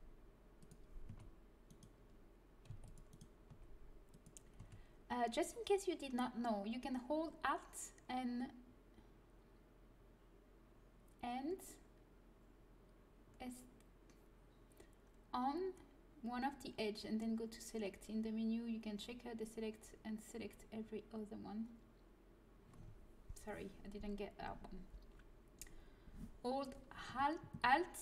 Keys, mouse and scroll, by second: 1.0 a, 2.6 c, 3.4 g, 4.5 a, 27.0 a, 27.6 a.